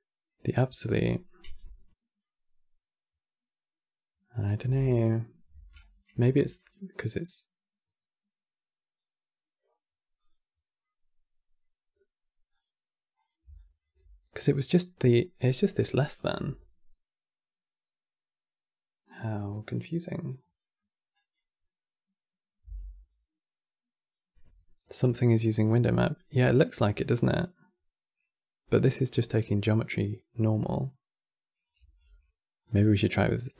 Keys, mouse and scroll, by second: 0.7 click, 1.2 m, 1.9-5.0 middle drag, 5.5 alt+click, 6.4-9.4 middle drag, 9.9 click, 10.5-12.2 middle drag, 12.2 click, 12.9 click, 13.3 alt+click, 14.0-15.7 middle drag, 15.7-18.7 drag, 20.3-20.8 middle drag, 20.8 click, 22.4 m, 25.4-28.8 middle drag, 28.8 click, 31.5 q.